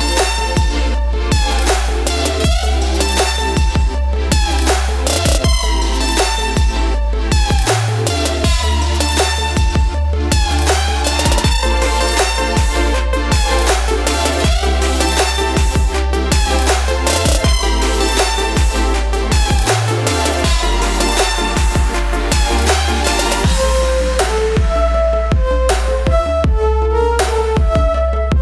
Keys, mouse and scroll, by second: 1.3 click, 2.9 typing, 3.9-9.3 drag, 3.9 typing, 9.3 ctrl+;, 11.0-18.6 drag, 19.5-24.9 drag, 24.9 ctrl+space, 26.2 click.